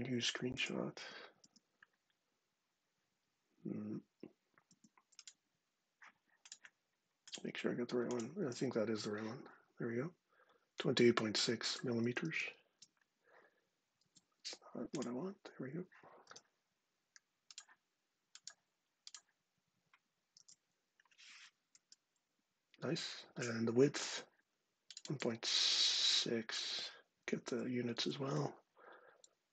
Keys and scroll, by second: 0.7 space, 1.2 space, 4.4 space, 8.2 space, 12.0 super+c, 12.3 super+Tab, 13.8 super+Tab, 16.0 d, 20.1 super+v, 21.4 Return, 22.9 super+Tab, 27.1 super+c, 27.7 super+Tab.